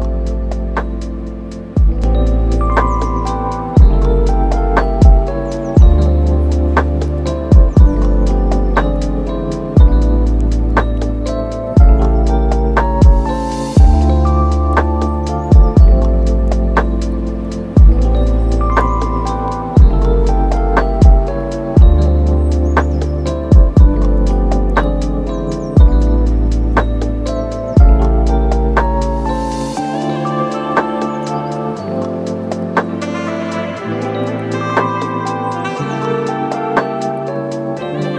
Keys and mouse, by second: 0.0 shift+middle click, 0.1 Tab, 0.2 middle click, 0.4 middle click, 0.8 right click, 1.4 middle click, 1.6 shift+middle click, 1.8 middle click, 2.5 middle click, 2.6 super+s, 2.7 middle click, 3.5 super+s, 3.7 click, 4.7 middle click, 5.3 middle click, 5.7 shift+middle click, 5.9 middle click, 6.4 click, 6.5 shift+click, 6.6 middle click, 7.1 middle click, 7.5 shift+click, 7.6 shift+click, 7.7 middle click, 8.2 shift+click, 8.3 middle click, 8.7 shift+click, 9.0 super+z, 9.2 super+z, 9.3 shift+middle click, 9.5 middle click, 9.7 middle click, 10.2 click, 10.4 super+z, 10.6 shift+middle click, 11.3 middle click, 11.7 shift+middle click, 12.0 super+s, 12.3 right click, 12.7-15.7 right drag, 16.0 middle click, 16.4 Tab, 16.7-17.9 middle drag, 19.0-20.5 middle drag, 20.6 middle click, 21.4 click, 21.6 Tab, 22.1 click, 22.2 Tab, 22.5 super+s, 23.1 click, 23.3 click, 24.6 click, 25.0 middle click, 25.7 shift+middle click, 25.9 click, 26.0 super+s, 26.1 middle click, 28.0 click, 28.2 super+s, 28.4 click, 28.8 super+s, 28.9 shift+middle click, 30.2 click, 32.3 click, 32.7 click, 32.9 middle click, 33.6 click, 33.8 click, 34.5 click, 34.9 click, 35.5 middle click, 36.0 super+s, 36.0 middle click, 36.5 middle click, 36.9 right click, 37.2 middle click, 37.4 middle click, 37.5 middle click, 38.1 super+s.